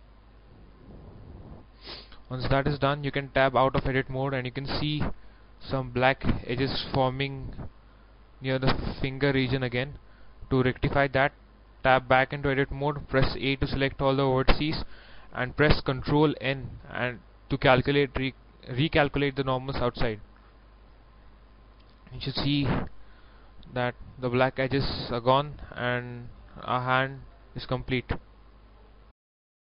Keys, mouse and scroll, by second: 0.1 middle click, 2.2 scroll down 1, 3.3 scroll down 1, 4.0 middle click, 4.9 scroll up 1, 5.4 shift+middle click, 5.8-6.5 scroll up 1, 7.5-10.5 middle drag, 10.5 scroll down 1, 11.6 right click, 11.9 Tab, 12.8-14.0 middle drag, 14.0 a, 16.0 ctrl+n, 21.0 click, 21.9 Tab, 22.6-25.6 middle drag, 25.6 scroll down 1, 25.9 scroll up 1, 26.1 middle click, 26.7 scroll down 1, 27.0 middle click, 28.0 scroll up 1.